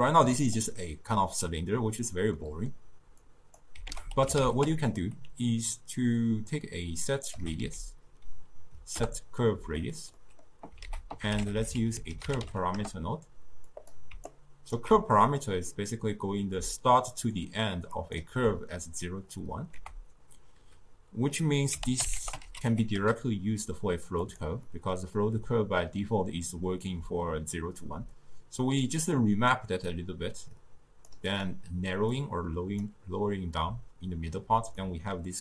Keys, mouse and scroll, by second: 0.2 click, 2.4 middle click, 2.9-3.4 scroll down 2, 3.4 click, 4.0 ctrl+a, 10.3 middle click, 10.9 ctrl+a, 14.4-16.6 alt+right drag, 16.6 d, 16.8 click, 17.4-17.8 d, 18.1 click, 18.2 d, 18.3 d, 19.8 ctrl+a, 24.8-27.9 middle drag, 29.1-34.8 drag, 34.8 scroll up 2, 34.9-35.4 middle drag.